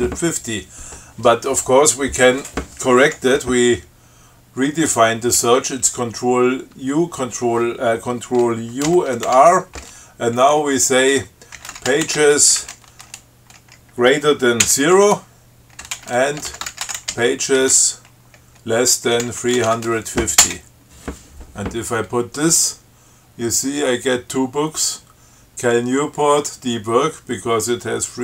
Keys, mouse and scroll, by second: 9.1 ctrl+u, 9.5 ctrl+r, 11.6-13.4 typing, 14.9 0, 16.2-20.4 typing, 20.6 Return, 23.6 scroll up 2.